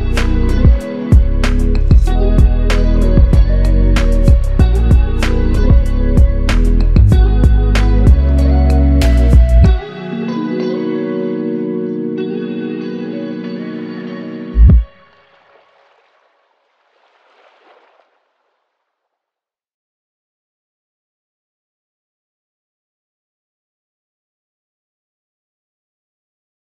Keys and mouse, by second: 7.0 ctrl+click, 8.1 double click, 14.7 alt+click, 18.9 double click.